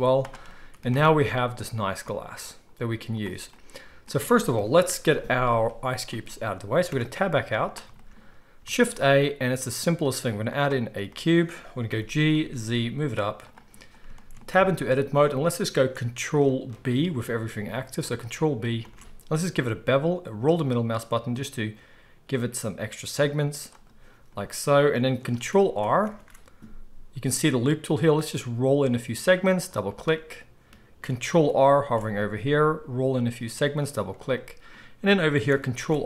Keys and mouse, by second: 0.0 z, 0.9 Tab, 4.5 KP_1, 5.3 z, 6.8 Tab, 7.3 z, 8.6 shift+a, 11.8 g, 13.4-14.3 middle drag, 14.5 Tab, 18.7 ctrl+b, 18.9-36.0 middle drag, 26.1 ctrl+r, 31.8 ctrl+r, 35.7 ctrl+r.